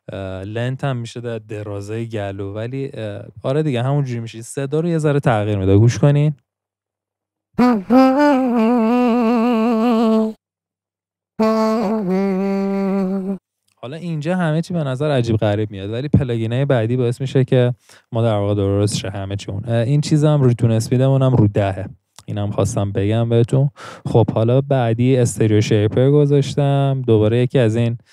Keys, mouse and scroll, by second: 7.5-9.7 middle drag, 7.5 scroll, 8.3 scroll, 11.3 i, 13.0 middle click.